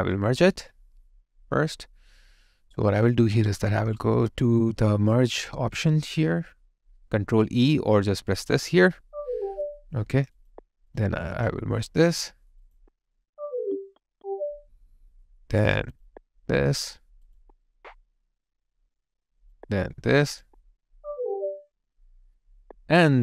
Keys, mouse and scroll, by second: 11.3 double click.